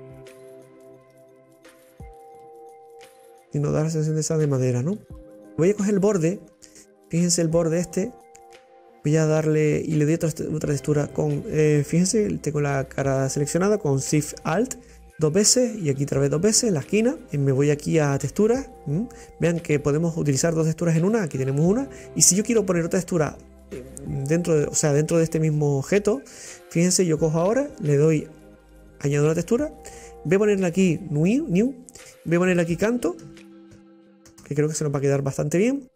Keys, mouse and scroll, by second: 0.1 click, 0.8 scroll down 2, 1.0-4.0 middle drag, 5.5 middle click, 5.9 scroll up 1, 7.8 click, 8.9 click, 8.9 middle click, 8.9 right click, 10.1 click, 10.1 middle click, 10.1 right click, 11.2 right click, 15.1 alt+shift+right click, 16.1 alt+shift+right click, 17.0 scroll down 2, 22.8 scroll down 2, 23.1-25.9 middle drag, 25.9-26.3 scroll up 2, 26.4-28.9 middle drag, 28.9-30.5 drag, 31.3 click, 32.0-35.9 drag.